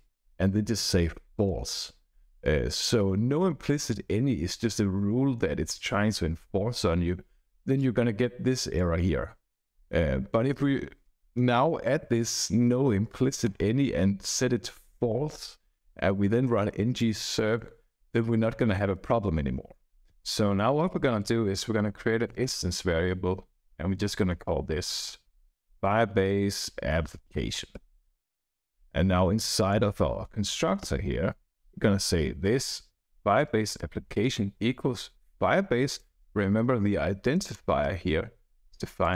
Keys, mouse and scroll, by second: 1.3 click, 21.0 Up, 21.1 Up, 21.9 Down, 22.2 Return, 22.4 Return, 22.7 Up, 24.9-28.0 typing, 29.5 click, 30.5 Left, 31.7-35.6 typing, 35.8 Return, 37.2 click, 37.8-38.5 scroll up 1, 39.0 click.